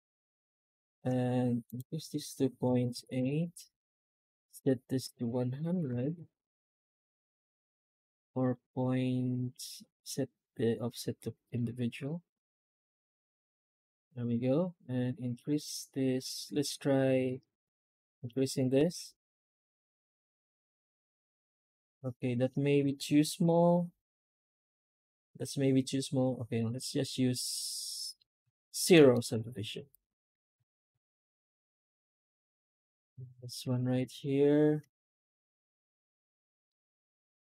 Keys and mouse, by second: 23.3 F9, 27.3-28.0 middle drag, 28.5 middle drag, 29.0 shift+middle drag, 29.8 right click, 30.1 Tab, 30.8 a, 31.5 Tab, 31.9 right click, 32.1 Tab, 32.3 a, 32.7 Tab, 32.8 middle drag, 36.6-37.5 middle drag.